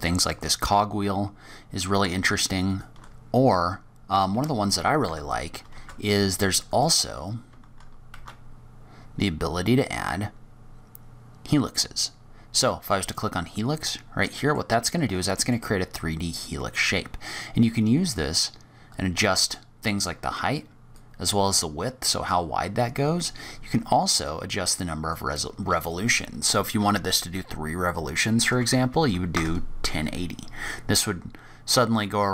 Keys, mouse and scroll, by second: 0.9-1.3 scroll down 3, 1.3-1.9 scroll up 1, 2.6 shift+right click, 3.2-3.5 scroll down 2, 3.5-4.0 scroll up 2, 4.3 shift+Tab, 4.9 Tab, 5.6 shift+Tab, 6.6 click, 8.1 shift+a, 13.7 middle click, 14.9 middle click, 18.1 click, 19.9 click, 20.9 click, 24.2 click, 25.7 click.